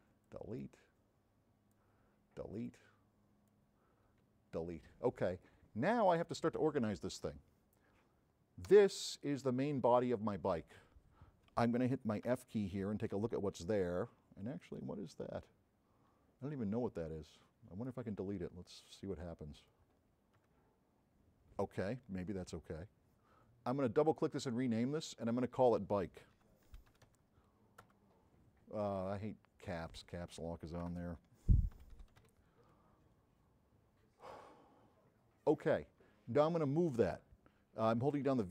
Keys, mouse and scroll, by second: 0.3 click, 2.7 click, 5.5-6.2 drag, 8.7 click, 12.4 f, 14.7 click, 17.4-18.0 drag, 18.7 click, 23.9 click, 25.4 click, 26.4 b, 27.1 k, 30.0 click, 32.4 e, 32.8 Return, 34.3 click, 36.1 v, 38.1 v, 38.4-38.5 drag.